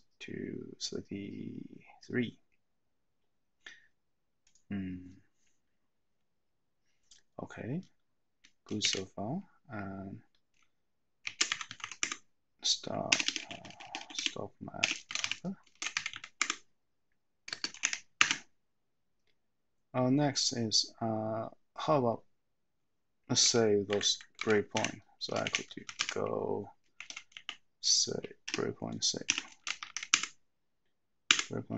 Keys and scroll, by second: 8.9 :, 11.8 typing, 12.0 Tab, 13.0-17.9 typing, 23.5 Down, 23.8 Up, 24.3 Down, 24.8 Up, 25.2-27.3 typing, 28.4-30.4 typing.